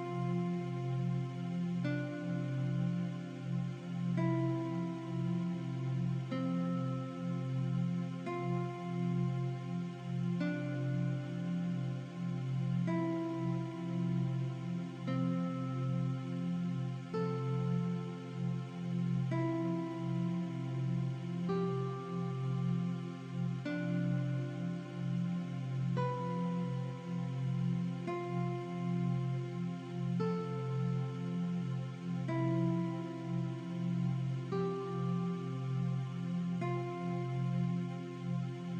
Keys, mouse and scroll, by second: 1.1 click, 5.8 Right, 7.1 t, 7.3 click, 7.8 KP_Enter, 8.3 click, 8.7 BackSpace, 9.0 space, 10.1 click, 10.4 KP_Enter, 11.3 click, 11.5 KP_Enter, 12.5 click, 13.6 click, 14.2-14.9 scroll down 1, 15.0 click, 15.3 alt+Up, 15.8 shift+Up, 16.4 click, 16.7 scroll down 1, 16.8 scroll up 1, 17.5 click, 18.6 scroll up 1, 19.0 scroll down 1, 19.3-20.0 scroll up 3, 20.0 scroll down 1, 20.4 scroll up 1, 21.1 click, 23.6 alt+Right, 25.2 click, 25.7-26.1 alt+shift+scroll down 2, 26.1-26.9 scroll up 2, 26.9 click, 27.6 shift+Up, 27.7 Down, 28.1 click, 28.3 scroll down 1, 28.4 scroll up 1, 28.6 click, 31.5 click, 32.3 click, 34.4 click.